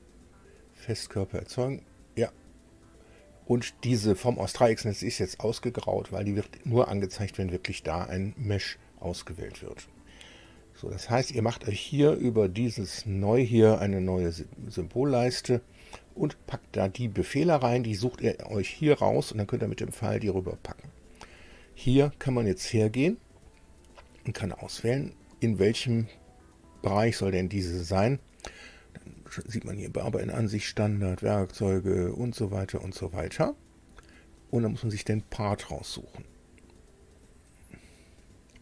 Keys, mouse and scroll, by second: 12.9 click, 14.7 click, 22.9-23.4 scroll down 2, 23.4 scroll up 2, 24.5 click, 32.1-32.5 scroll down 2, 34.7-35.1 scroll up 2, 37.2 click.